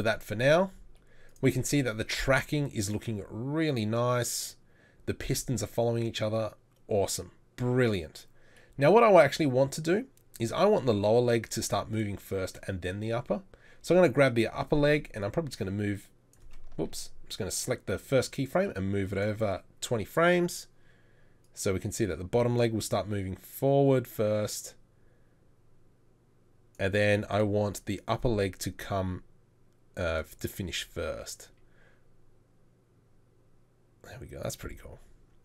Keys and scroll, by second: 16.9 ctrl+z.